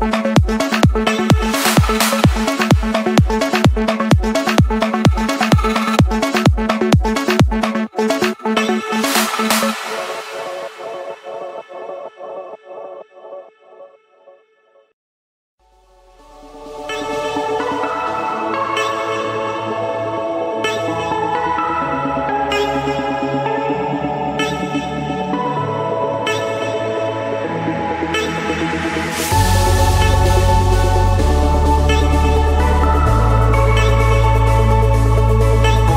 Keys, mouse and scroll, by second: 0.4 Escape, 1.4 click, 5.0 click, 5.2 scroll, 7.0 click, 8.7 click, 9.8 click, 10.1 Escape, 11.7-12.9 drag, 13.1-14.4 typing, 15.1 Return, 15.4-17.7 typing, 16.3 Return, 18.8 click, 20.5 click, 20.8-21.6 scroll, 22.1 Escape, 24.3-24.8 typing, 26.6-31.0 drag, 32.2 typing, 32.8 Return, 34.4 Return.